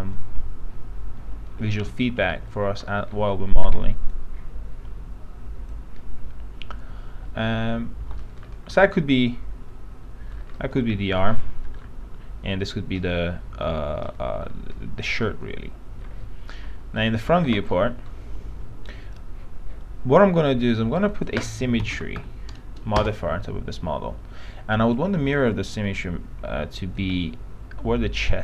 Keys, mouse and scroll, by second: 0.4-2.5 alt+middle drag, 2.6-3.0 scroll down 1, 3.0 middle click, 3.2-3.7 scroll up 1, 4.2-6.5 drag, 8.2 p, 8.4-8.8 scroll down 1, 9.0 alt+middle click, 11.1 scroll down 1, 11.6 alt+middle click, 14.2 alt+middle click, 15.6 alt+middle click, 17.1 click, 17.9 middle click, 21.2 click, 22.1 click, 22.4 click, 23.2 Return, 25.1-28.4 drag.